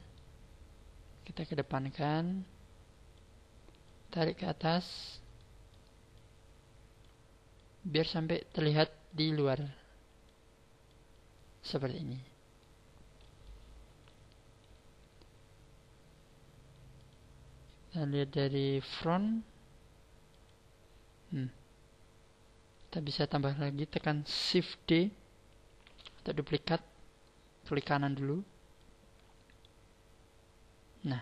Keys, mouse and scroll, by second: 0.6-1.0 scroll up 6, 1.5 click, 3.8 click, 5.3 middle click, 6.1 click, 7.5 click, 9.1 click, 10.9 click, 12.1 middle click, 13.1 middle click, 20.9-21.7 scroll down 2, 21.7-23.3 scroll up 4, 23.3 shift+middle click, 25.8 shift+d, 28.2 right click, 28.8 click.